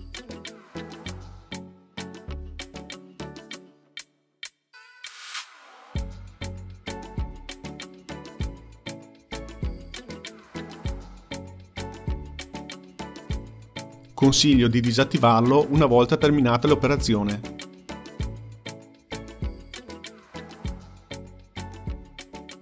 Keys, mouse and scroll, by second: 0.7-2.3 drag, 3.4-5.0 drag, 5.0-6.0 ctrl+middle drag, 6.0-9.6 drag, 9.6 Left, 9.7-10.2 Left, 10.8 Left, 14.6 click.